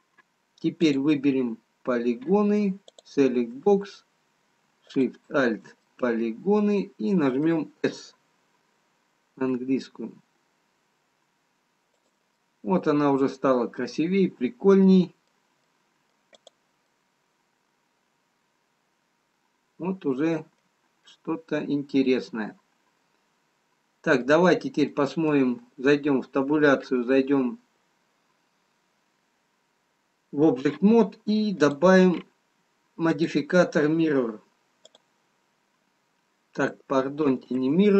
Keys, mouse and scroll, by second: 1.0 click, 4.1 click, 5.4 alt+shift+click, 5.9 alt+shift+click, 6.1 middle click, 9.5 s, 12.4 middle click, 17.0 middle click, 17.0 click, 26.4 Tab, 26.4 middle click, 26.4-26.8 scroll down 2, 31.9 click, 33.7 click.